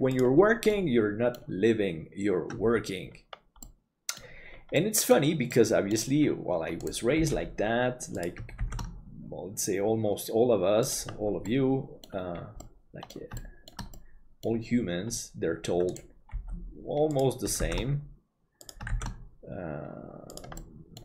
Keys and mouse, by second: 0.7 middle click, 3.7 middle click, 4.8 middle click, 5.6 middle click, 7.2 g, 8.7 shift+d, 11.5 middle click, 12.7 middle click, 13.5 shift+middle click, 14.0 middle click, 16.3 g, 17.6 shift+d, 20.7 middle click.